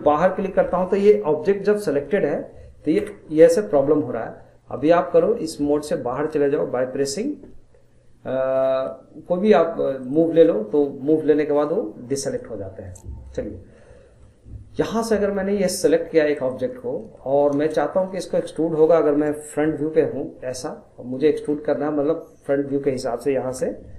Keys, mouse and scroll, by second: 3.0 ctrl+z, 10.0-12.3 drag, 12.9 middle click, 13.5 scroll up 1, 13.7-16.4 middle drag, 16.4 click, 16.7 scroll down 2, 17.0 middle click, 17.5 scroll down 1, 17.8-19.6 shift+middle drag, 19.6 KP_1, 21.5-23.5 middle drag, 23.5 KP_1.